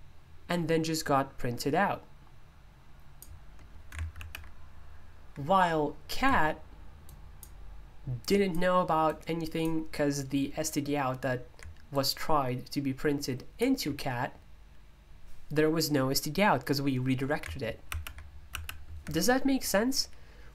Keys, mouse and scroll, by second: 7.0 click, 8.2 click, 9.1-16.3 drag.